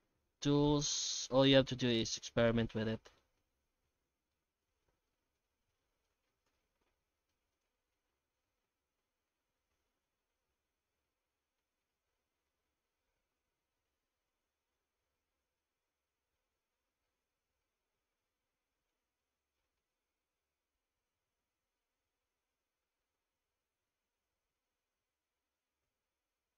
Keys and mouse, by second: 3.6 middle click, 4.6 alt+a, 5.4 middle click, 6.5 ctrl+z, 6.9 ctrl+z, 7.3 shift+q, 11.6 middle click, 12.2 alt+shift+z, 15.7 ctrl+F9, 16.0 middle click, 17.3-18.9 middle drag, 19.2 middle click, 19.8 shift+middle click, 20.4 F9.